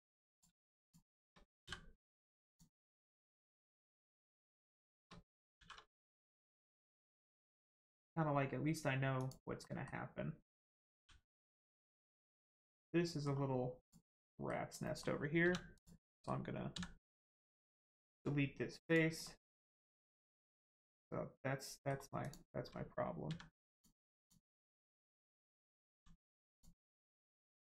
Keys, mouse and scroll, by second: 0.8 shift+click, 2.4 click, 2.5 click, 3.4 middle click, 4.2 click, 4.6 shift+click, 5.6 shift+r, 6.2 middle click, 7.2 scroll up 1, 7.4 middle click, 8.0-9.2 scroll up 1, 9.2 click, 9.6 middle click, 10.9 g, 11.8 right click, 12.4 scroll down 1, 12.7 middle click, 13.8 click, 14.3 middle click, 15.4 3, 15.7 click, 16.1 middle click, 16.7 x, 18.8 click, 19.2 middle click, 22.2 click, 23.3 x, 23.7 click, 24.7 middle click, 25.9 x, 26.5 click, 26.8-27.2 scroll down 1, 27.2 middle click.